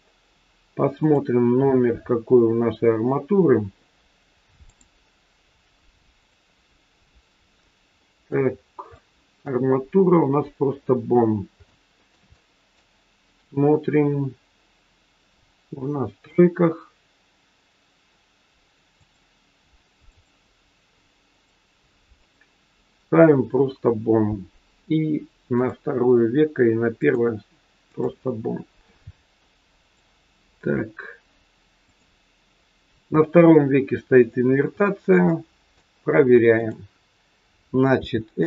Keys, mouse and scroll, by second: 1.0 click, 4.6 click, 6.1 click, 7.9 middle click, 8.5-8.9 scroll up 5, 8.9 shift+middle click, 10.6-11.0 scroll down 2, 11.3-11.6 scroll down 3, 11.6 shift+middle click, 12.4 middle click, 16.1 click, 18.9 click, 21.3 click, 25.5 click, 26.9 click, 29.7 click, 31.9 click, 34.4-34.9 scroll up 2, 34.7 shift+middle click, 35.3 middle click, 36.5 click, 38.0 r.